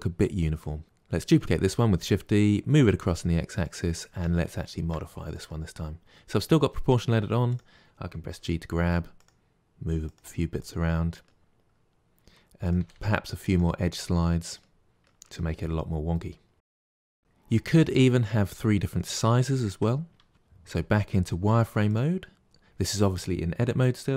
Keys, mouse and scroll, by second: 0.8 shift+d, 4.1 Tab, 4.5-7.5 shift+middle drag, 7.5 click, 8.3 g, 10.0 click, 10.2 g, 10.9 middle click, 11.9 scroll up 1, 12.6 click, 12.7 g, 14.1-15.2 middle drag, 15.2 g, 15.5 middle click, 15.9 click, 16.1 middle click, 16.3 Tab, 16.4 scroll down 2, 16.5-17.5 middle drag, 19.5 Tab, 20.3 shift+middle click, 20.5 z, 22.4 click.